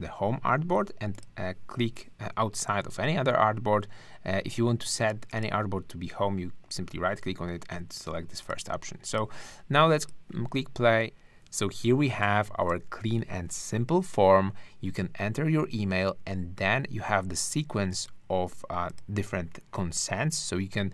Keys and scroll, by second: 10.9 super+r, 12.4 shift+`.